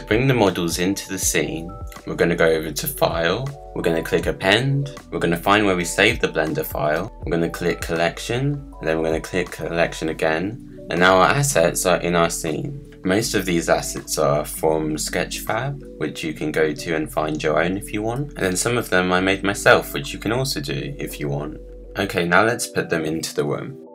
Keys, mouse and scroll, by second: 3.0-6.2 drag, 13.0-13.4 scroll down 4, 13.4-14.9 middle drag, 14.9 click, 16.7 click, 17.3-23.9 middle drag.